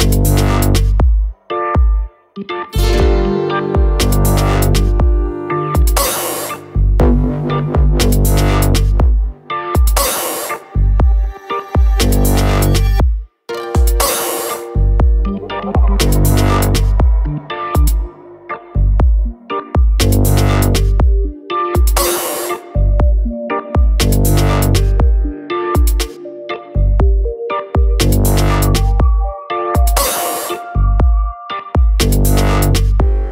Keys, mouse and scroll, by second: 6.3 alt+click, 8.4 alt+click, 12.1 KP_Enter, 13.4 click, 14.1 ctrl+t, 15.4 alt+click, 24.0 Return, 24.8 click, 29.6 ctrl+click, 31.0 ctrl+click, 32.5 click.